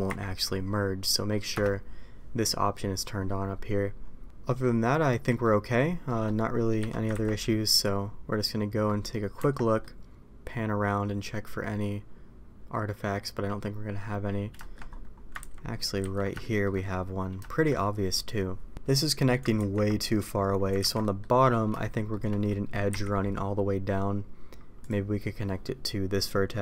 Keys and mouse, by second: 4.2 middle click, 4.5 middle click, 5.2 middle click, 6.0 middle click, 6.7 a, 7.1 ctrl+t, 7.3-8.8 middle drag, 9.3 Tab, 9.7-14.0 middle drag, 14.5 shift+middle click, 15.6 ctrl+z, 16.3 middle click, 17.3 middle click, 18.9 middle click, 19.5 ctrl+t, 21.0 ctrl+z, 21.0 middle click, 21.7 shift+middle click, 22.8 k.